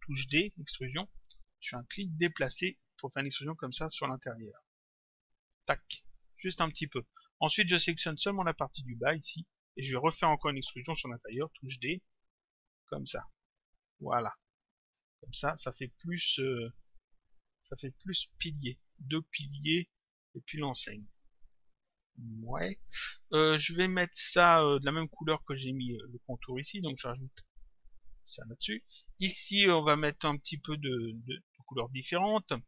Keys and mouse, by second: 0.2 d, 1.8 click, 7.9 click, 9.3 click, 11.4 d, 12.1 click, 16.8 click, 18.2 click, 20.5 click, 26.5 click.